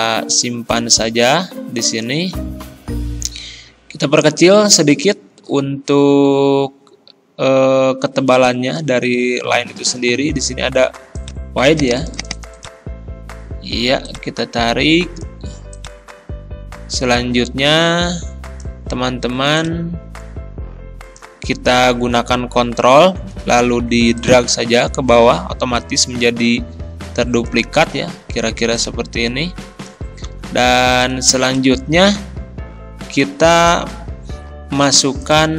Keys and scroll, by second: 30.3 ctrl+z.